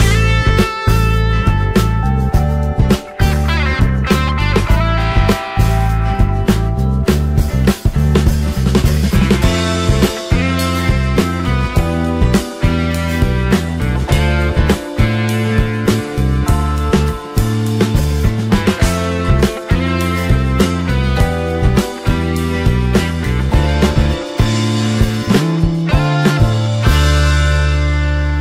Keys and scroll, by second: 2.2 ctrl+t.